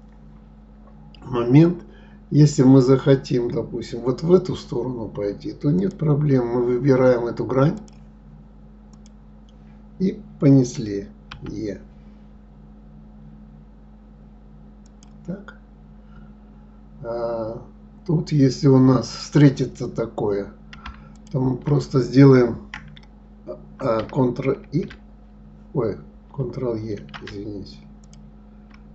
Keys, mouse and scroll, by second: 5.8 click, 7.8 click, 8.9 click, 11.3 e, 19.2 click, 21.1 shift+click, 24.6 ctrl+e, 28.0 ctrl+e.